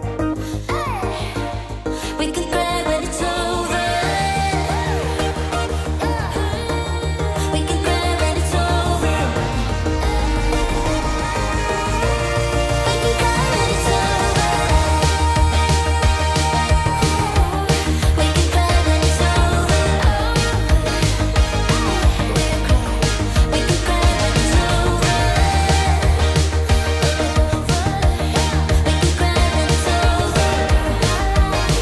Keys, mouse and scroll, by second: 7.0 click, 9.5 5, 11.8 0, 11.9 0, 12.6 0, 12.8 Return, 15.8 click, 16.1-17.0 typing, 17.6 Return, 19.7 click, 20.1-21.3 typing, 24.0-26.9 drag, 27.7-31.7 drag.